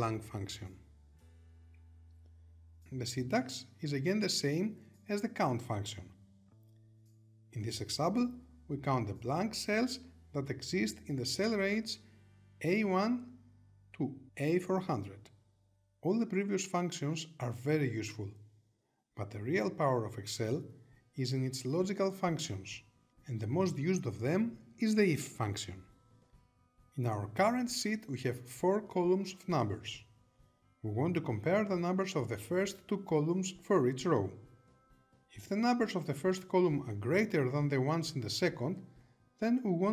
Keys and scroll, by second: 14.8 Return.